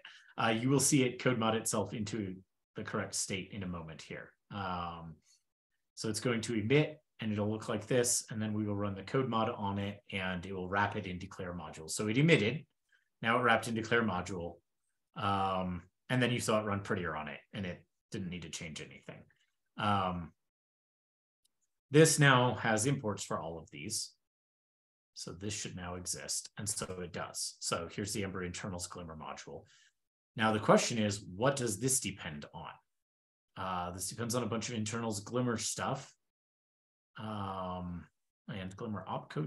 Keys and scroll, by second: 24.2 shift+super+[.